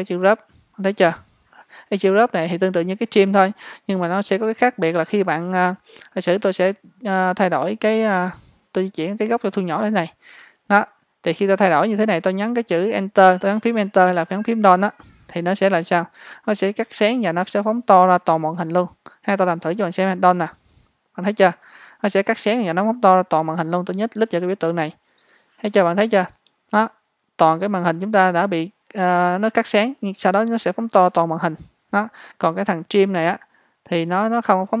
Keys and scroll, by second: 26.4 space, 32.0 ⟲.